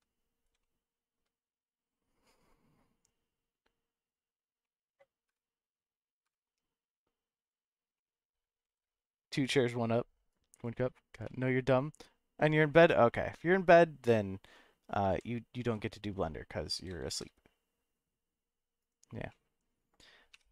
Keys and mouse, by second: 0.6-1.1 shift+middle drag, 4.0 click, 4.6 middle click, 5.3 KP_0, 7.4 click, 7.9-8.3 middle drag, 8.6 shift+s, 11.2-11.7 middle drag, 15.1 g, 17.1 shift+z, 18.8 click, 19.3-19.6 middle drag.